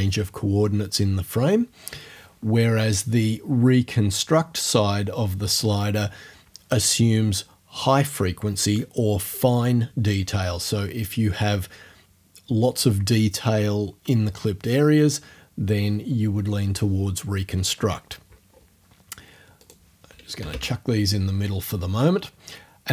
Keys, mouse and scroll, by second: 19.6 click, 20.4 0, 20.5 Return.